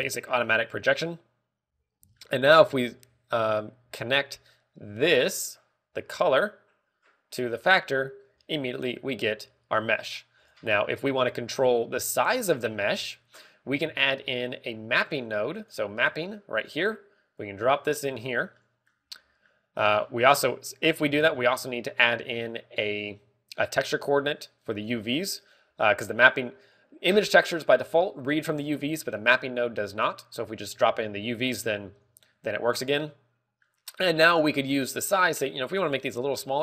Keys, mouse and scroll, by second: 0.8 Tab, 1.8 scroll up 2, 3.0 shift+middle click, 3.5-4.0 scroll up 4, 4.8 middle click, 7.2 click, 12.9 click, 13.5 middle click, 14.8 shift+a, 16.9 g, 17.6 click, 18.3 click, 19.4 middle click, 20.1 middle click, 22.1 shift+a, 25.8 g, 26.4 click, 31.5 click, 33.9 middle click, 34.8-35.4 scroll up 2, 35.4 middle click.